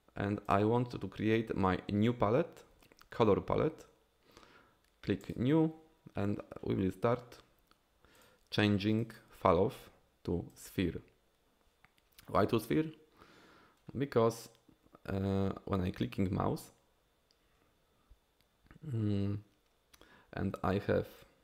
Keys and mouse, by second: 5.3 click, 8.3-12.0 drag, 21.2 click.